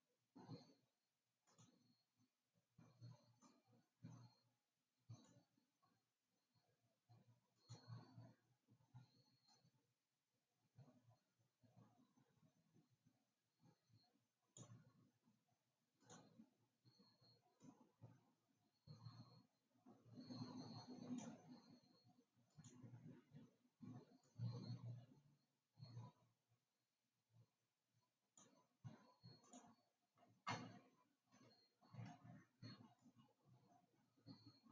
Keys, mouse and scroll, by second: 1.9 click, 3.7 click, 7.9 click, 9.8 click, 16.3 click, 17.9 click, 22.9 click, 24.5 click, 29.6 click, 31.9-33.2 scroll down 1, 33.2 click.